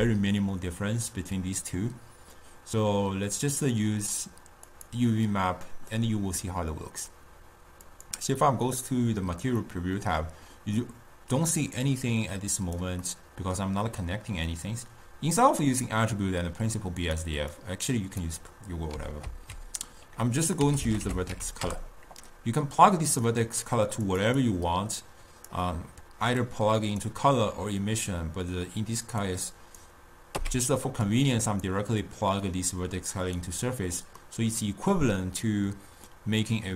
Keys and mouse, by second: 6.1-8.6 middle drag, 8.6 click, 9.7-11.9 middle drag, 11.9-13.4 drag, 13.4-16.5 middle drag, 17.2 click, 17.9-19.5 drag, 19.5 ctrl+a, 24.4-26.9 drag, 29.4-30.6 drag, 30.6 x, 31.4 click, 32.6-34.5 drag, 34.5-36.7 middle drag.